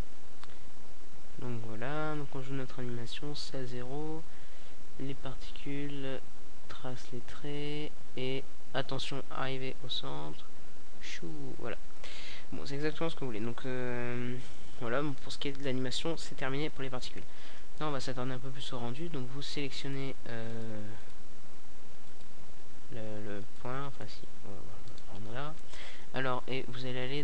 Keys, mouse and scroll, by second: 12.0 click, 12.1-12.9 right drag, 12.9-13.6 drag, 15.3-18.7 drag, 19.3-21.5 middle drag, 21.5-24.8 drag, 26.0 click.